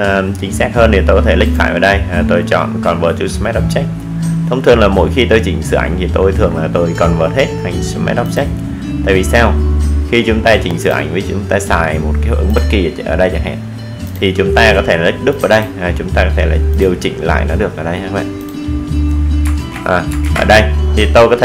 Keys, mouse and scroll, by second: 2.7 click, 4.9 click, 13.5 z, 16.0 click.